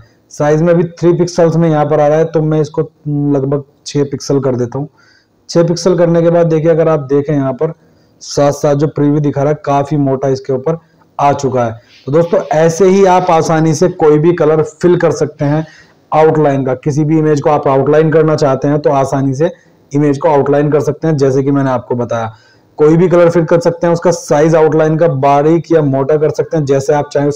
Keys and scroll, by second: 9.4 ctrl+1.